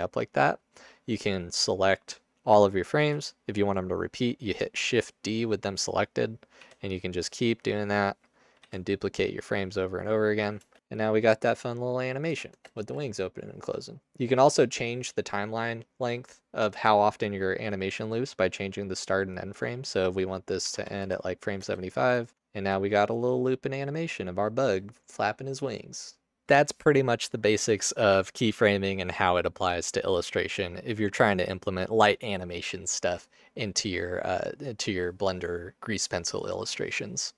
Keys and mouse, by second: 1.1-1.6 drag, 3.0 shift+d, 6.6 shift+d, 8.6 shift+d, 10.7 space, 10.9 Tab, 12.2 space, 12.6 space, 12.8 space, 21.7 space, 22.3 Tab.